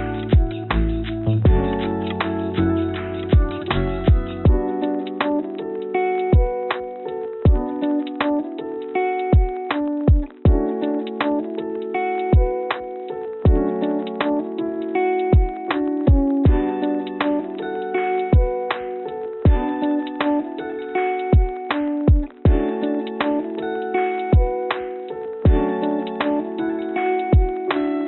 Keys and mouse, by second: 0.5 Tab, 0.9 click, 3.4 l, 4.5 g, 5.8 click, 6.3 click, 7.3 l, 8.2 g, 13.3 g, 15.3 g, 19.4 click, 19.8 Tab, 20.5 click, 21.5 click, 23.4 click, 25.1 shift+click, 27.5 g.